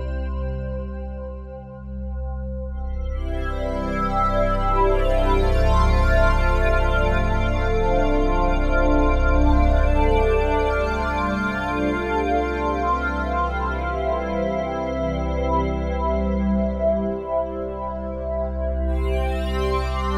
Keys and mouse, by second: 0.0 space, 0.4 click, 0.8-1.9 drag, 2.5 click, 2.8 space, 4.0 space, 6.8-10.0 drag, 10.7 Delete, 11.4-12.0 drag, 13.3 click, 15.3 click, 16.5-18.6 drag, 18.6 n, 19.4 click, 20.0 n.